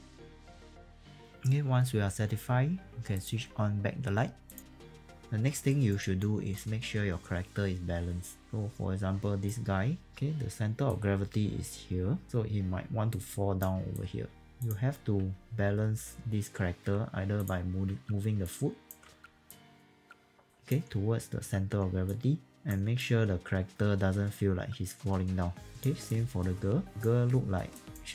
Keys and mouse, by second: 0.0-1.7 typing, 0.9 click, 1.1 click, 5.7 alt+right click, 6.0 alt+right click, 6.6 alt+click, 10.0 ctrl+2, 14.6 click, 15.2 w, 17.4 click, 17.9 w, 18.4 alt+click, 19.5 click, 20.4 alt+click, 22.1 click, 23.0 alt+click, 26.1 alt+click, 27.7 alt+click.